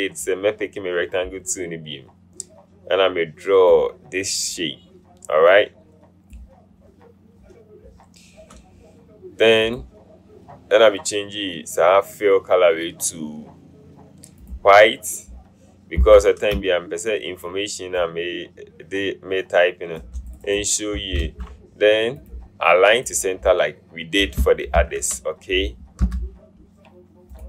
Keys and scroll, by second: 16.2 v, 21.3 ctrl+a, 24.9 ctrl+f, 26.1 v.